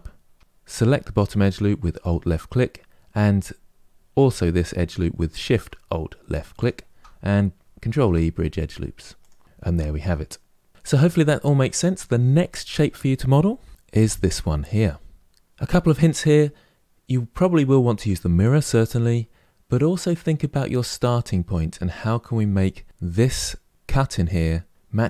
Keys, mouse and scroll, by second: 0.1 Tab, 1.7 alt+click, 6.3 alt+shift+click, 7.6 ctrl+e, 9.4-10.7 middle drag, 12.4 click, 13.7-15.1 middle drag.